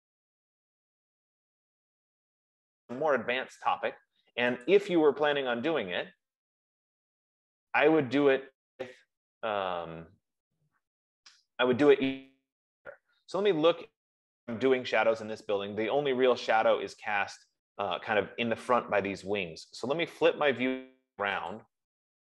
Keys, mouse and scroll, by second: 5.9-11.7 drag, 11.7 scroll, 13.4-13.8 scroll, 14.6-15.3 scroll.